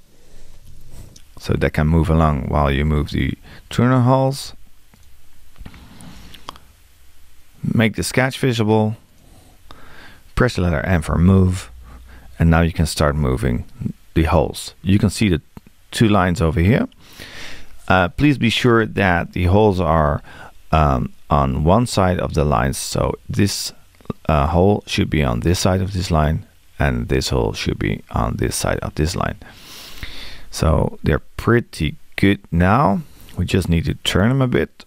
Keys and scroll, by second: 10.8 m.